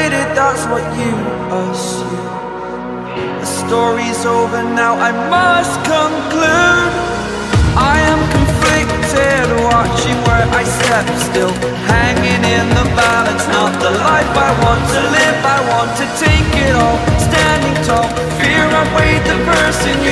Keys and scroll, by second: 7.8 ctrl+i, 19.8 ctrl+j.